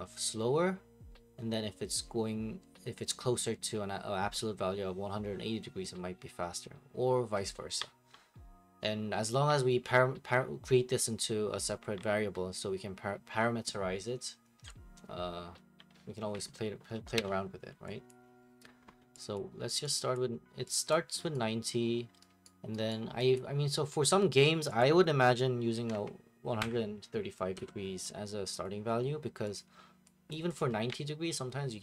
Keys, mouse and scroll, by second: 17.1 Escape, 18.1 click, 19.4 click, 20.2 click, 20.9 click, 21.3 right click, 22.4 right click, 22.9 right click, 23.4 click, 24.8 click, 25.5-27.5 typing, 28.6 click, 29.6 click, 30.3 click, 30.5 click.